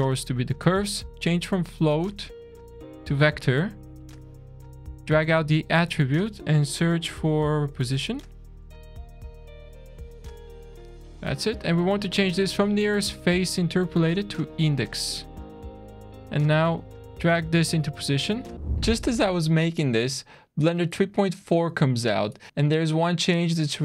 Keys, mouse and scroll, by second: 0.6 scroll up 2, 1.0 click, 3.6 middle click, 4.8 click, 11.2 middle click, 11.7-12.7 scroll up 1, 12.7 click, 12.7 scroll up 1, 14.8 scroll down 1, 15.1 scroll up 1, 15.2 middle click, 16.9 click, 18.5 scroll down 1.